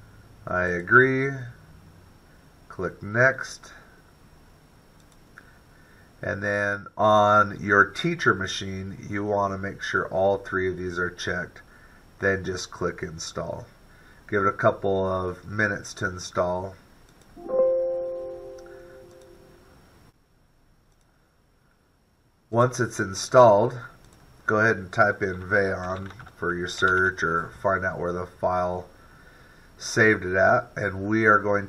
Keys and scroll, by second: 25.9-29.3 typing.